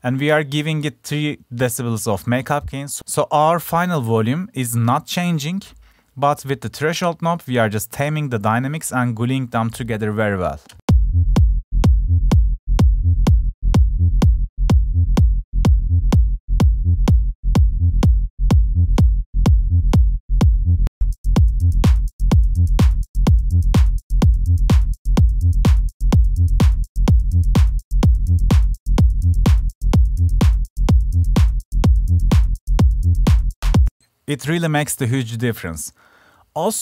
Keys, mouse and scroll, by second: 25.8 click, 26.1-28.0 drag.